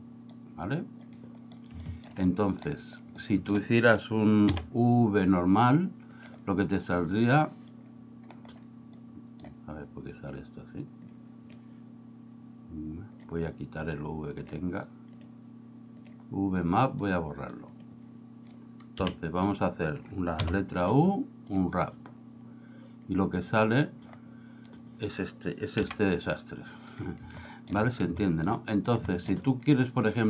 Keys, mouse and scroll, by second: 2.1 shift+middle click, 2.5 middle click, 3.3 shift+middle click, 4.5 u, 9.0 middle click, 11.2 click, 13.2 click, 14.5 drag, 15.2 click, 16.1 drag, 17.8 click, 19.1 KP_1, 20.5 u, 23.3 click, 25.9 g, 26.9 right click, 27.6 middle click, 28.3 shift+middle click, 29.1 shift+middle click.